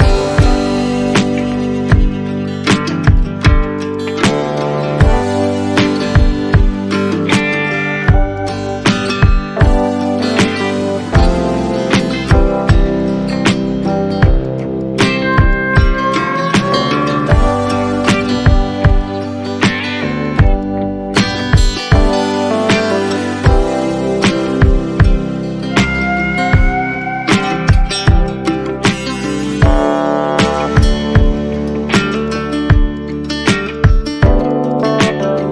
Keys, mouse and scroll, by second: 1.2 alt+click, 2.8 shift+click, 3.8 shift+click, 4.9 shift+click, 6.3 shift+click, 7.0 alt+click, 8.5 shift+click, 9.9 ctrl+z, 10.8 shift+click, 11.7 shift+click, 11.8 alt+click, 13.0 shift+click, 13.5 shift+click, 15.3 shift+click, 17.2 shift+click, 19.7 shift+click, 20.2 shift+click, 20.6 shift+click, 21.6 shift+click, 21.9 alt+click, 22.2 shift+click, 22.5 alt+click, 24.7 Tab, 25.2 Tab, 26.0 Tab, 26.5 Tab, 27.5 alt+click, 27.7-28.3 scroll up 1, 28.5 Tab, 30.5 shift+click, 30.9 shift+click, 31.5 alt+click, 32.7 shift+click, 33.6 shift+click, 33.7 alt+click, 34.5 shift+click, 34.9 alt+click.